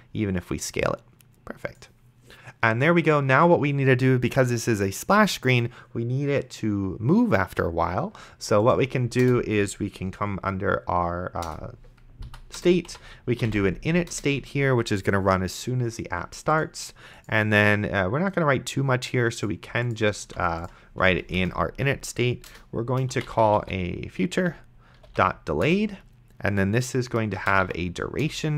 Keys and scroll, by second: 9.5 Return, 11.5 Return, 12.3 Up, 12.6 Return, 12.9 Tab, 13.4 i, 13.7 n, 14.1 Return, 20.5 ctrl+x, 21.4 Return, 22.5 Return, 23.0-25.6 typing, 25.7 Return, 27.3-28.1 typing, 28.2 Return.